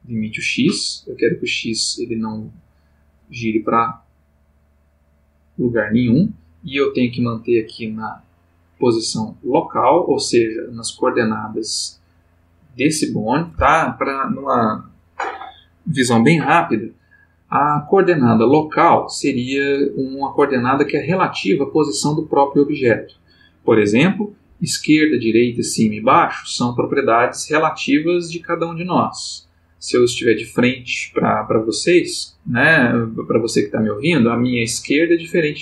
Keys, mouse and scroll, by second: 0.4 click, 7.4 click, 9.9 click.